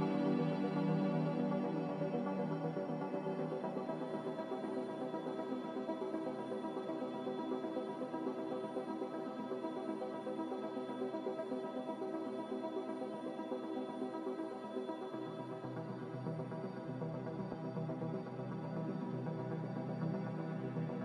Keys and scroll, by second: 19.1 z.